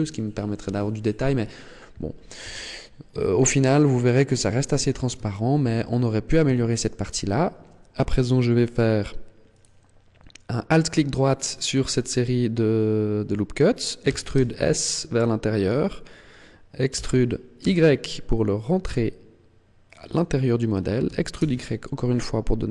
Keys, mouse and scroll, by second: 2.3 a, 3.0 scroll down 2, 3.6 middle click, 5.2 shift+middle click, 5.7-6.3 scroll up 4, 6.3 shift+middle click, 9.3 alt+right click, 11.1 middle click, 13.9 e, 15.6 click, 16.8 e, 20.0 click, 20.9 e.